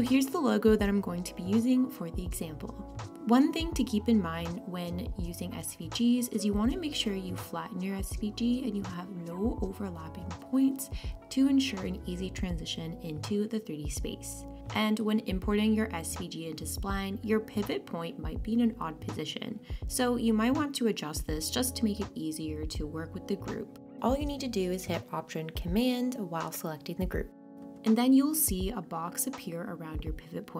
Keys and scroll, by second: 11.7 super+z.